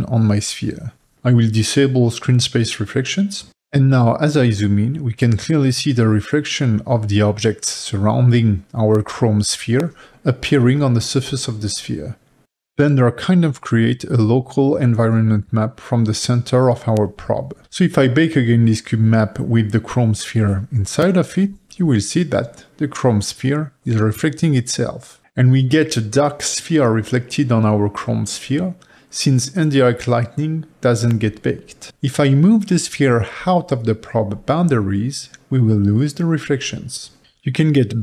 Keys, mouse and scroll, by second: 3.5 click, 3.9 middle click, 4.5 g, 7.2 click, 8.4-9.8 middle drag, 9.8-11.7 scroll up 3, 11.7-13.9 middle drag, 13.9-14.4 scroll down 3, 14.4-17.8 middle drag, 17.8-21.3 drag, 21.3-33.7 middle drag, 33.7 g, 37.3 middle click.